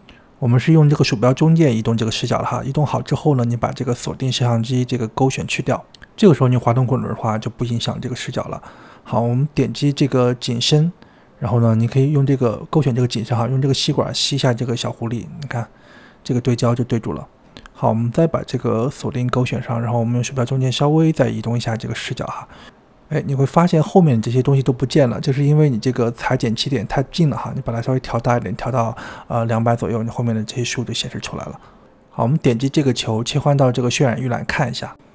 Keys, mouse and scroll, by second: 2.1-2.7 scroll up 1, 2.7-5.6 shift+middle drag, 5.6 click, 6.2-7.5 scroll up 7, 7.5-10.4 shift+middle drag, 10.4-16.5 drag, 16.5-19.3 shift+middle drag, 19.3 click, 19.8-21.3 shift+middle drag, 21.3-22.1 scroll down 1, 22.1-25.1 shift+middle drag, 25.4-29.4 drag, 29.4-32.0 shift+middle drag, 32.0 click, 32.2 g, 33.0-34.4 middle drag, 34.4-35.1 drag.